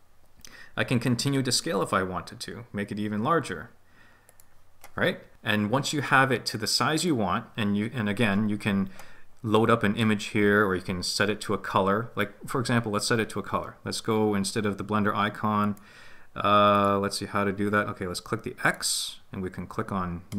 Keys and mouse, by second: 1.7 s, 4.2 click, 15.6-16.8 drag, 18.6 click.